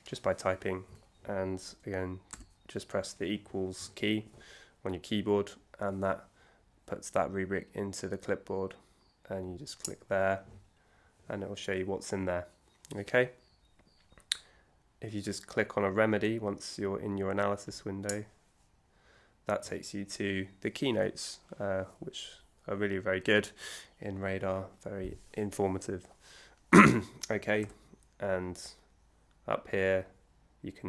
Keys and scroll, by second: 2.3 =.